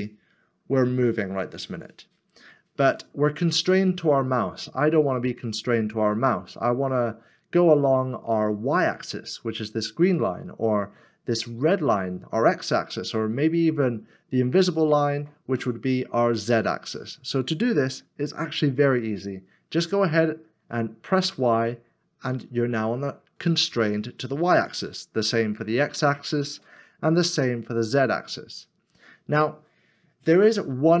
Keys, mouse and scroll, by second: 21.2 y, 25.6 x, 27.7 z.